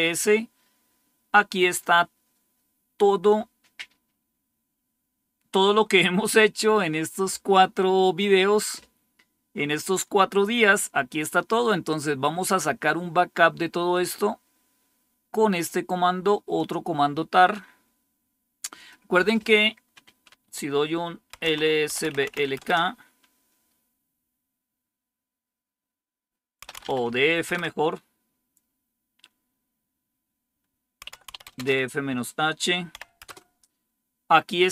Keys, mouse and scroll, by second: 13.5-17.0 drag, 18.7 click, 21.0-22.7 typing, 26.3-27.4 typing, 30.7-33.3 typing.